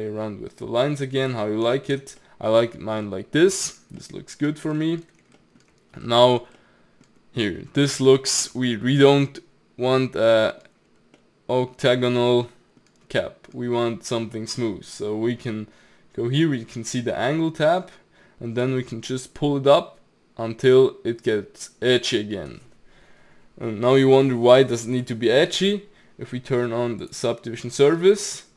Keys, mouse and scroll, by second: 1.6 ctrl+z, 2.2-2.7 middle drag, 2.7-3.1 scroll down 2, 3.1-7.2 middle drag, 7.2-8.2 scroll up 3, 8.2-10.9 shift+middle drag, 10.9-11.2 scroll down 2, 11.2-17.4 middle drag, 18.6-21.6 drag, 27.0 click.